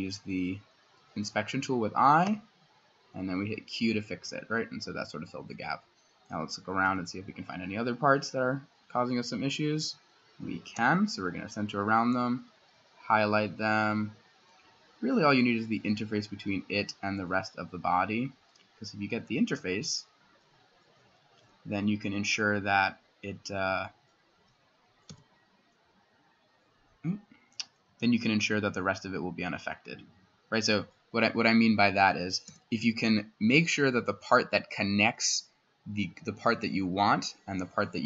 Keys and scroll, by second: 2.3 q, 6.9 c, 9.8 s, 10.8 c, 25.1 x, 27.9 s, 32.5 x.